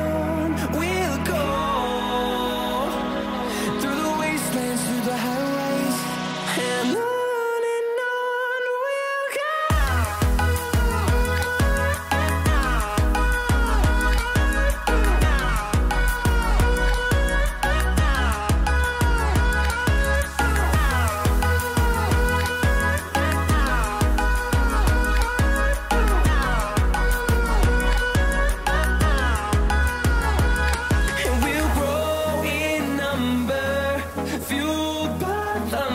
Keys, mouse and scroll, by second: 1.5 click, 6.2-6.8 scroll up 1, 7.3 click, 7.6-9.8 scroll down 1, 9.8-11.2 scroll up 1, 11.2 click, 12.8-17.5 scroll down 1, 17.5-19.5 scroll up 1, 20.3-22.2 scroll down 1, 27.7 F10, 30.1 click, 35.6 scroll up 1.